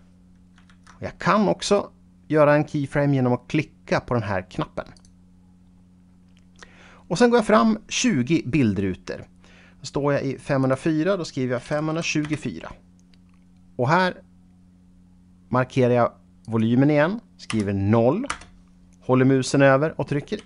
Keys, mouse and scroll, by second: 0.7 ctrl+z, 5.0 click, 10.7 click, 11.6 KP_5, 12.3 Return, 16.5 click, 17.6 KP_0, 18.4 Return.